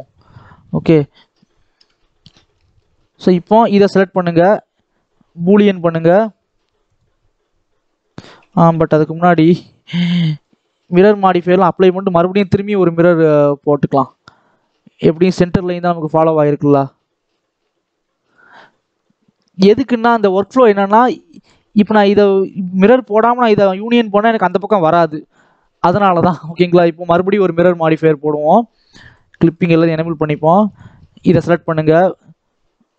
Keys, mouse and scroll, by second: 0.4 scroll down 1, 0.5-1.7 middle drag, 1.7 KP_7, 2.4 shift+middle click, 2.9 scroll up 2, 3.5 click, 5.5-6.9 drag, 9.1 KP_1, 10.2 click, 10.7 shift+middle click, 11.1-11.5 scroll up 2, 11.5 click, 11.7 Tab, 12.0 scroll up 1, 12.2 shift+middle click, 12.9-13.9 shift+middle drag, 13.9 click, 15.1 click, 16.8-17.7 scroll up 3, 17.7 x, 18.5-19.3 scroll down 10, 19.3 middle click, 20.2 click, 20.7-23.6 scroll down 1, 28.0-29.0 drag, 29.3 click, 30.2 Tab, 30.6 click.